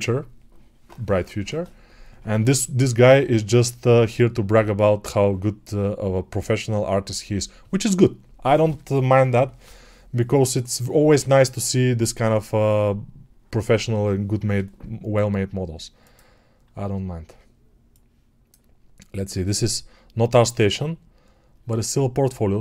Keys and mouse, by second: 18.0-22.6 right drag.